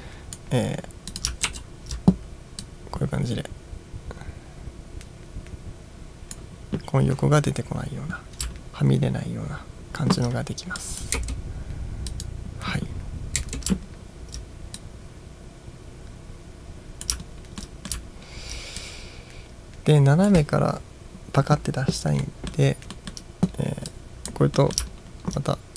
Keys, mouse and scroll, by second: 0.0-0.5 drag, 1.2 click, 1.5 ctrl+t, 2.7-6.4 drag, 8.6-9.1 ctrl+scroll up 3, 9.6-10.8 ctrl+scroll down 2, 10.9-11.2 drag, 11.2 space, 12.2 drag, 13.5 space, 14.0 ctrl+scroll down 1, 14.8-17.2 drag, 17.4 ctrl+scroll down 1, 17.7-18.1 ctrl+middle drag, 18.2 ctrl+scroll down 1, 18.8-20.3 drag, 22.3-22.6 middle drag, 23.0-23.9 middle drag, 23.9-24.3 drag, 24.6 middle drag, 25.0 ctrl+scroll down 1.